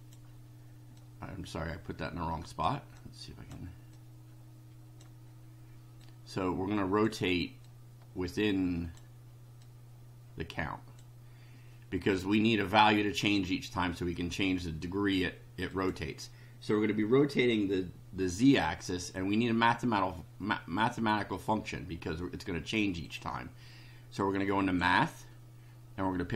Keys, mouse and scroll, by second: 0.9-2.8 drag, 2.9-3.6 drag, 3.9-5.2 drag, 6.0-7.2 drag, 7.6-9.2 drag, 9.6-11.2 drag, 15.7 click, 23.0 click, 24.6 click.